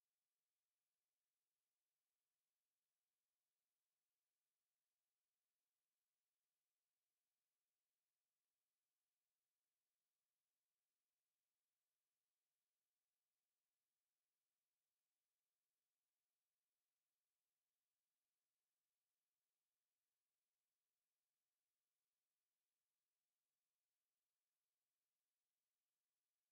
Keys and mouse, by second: 0.9 ctrl+z, 1.3 space, 2.8 alt+middle click, 4.0 alt+middle click, 5.9 alt+middle click, 10.5 ctrl+z, 12.7 space, 13.6 alt+click, 14.3 space, 15.9 click, 18.7 ctrl+z, 19.2 space, 20.4 space, 21.3 alt+click, 22.0 alt+right click, 22.5 alt+middle click.